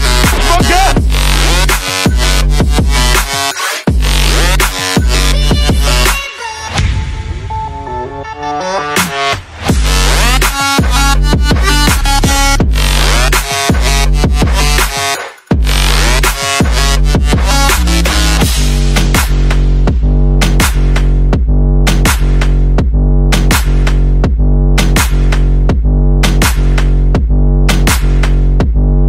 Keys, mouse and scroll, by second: 0.2 click, 2.1 click, 3.0 click, 3.9 click, 4.4 click, 4.9 click, 6.1 click, 8.3 click, 12.2 click, 12.9 click, 14.2 click, 15.7 click, 15.8 a, 16.3 click, 16.6 click, 17.0-18.9 typing, 19.7 click, 20.5 middle click, 21.7 click, 22.6 middle click, 22.7 middle click, 22.8 middle click, 23.6 click, 25.0 click, 25.8 click, 26.5 click, 27.2 click, 27.6 click.